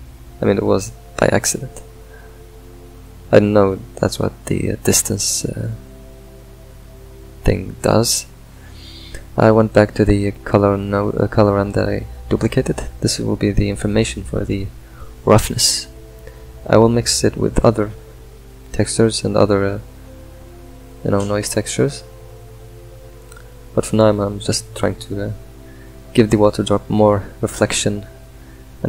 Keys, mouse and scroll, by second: 0.0 click, 1.4-5.5 ctrl+middle drag, 5.5-8.3 alt+drag, 10.7-12.8 drag, 15.1 click, 16.0 click, 16.9 click, 19.7 click, 22.4 click, 23.9 click, 28.0 click.